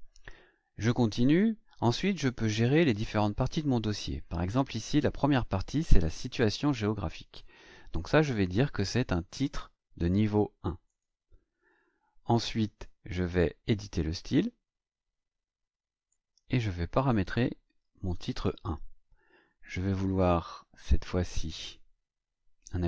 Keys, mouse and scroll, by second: 6.3 click, 8.5 click, 10.8 click, 12.6 right click, 13.7 click.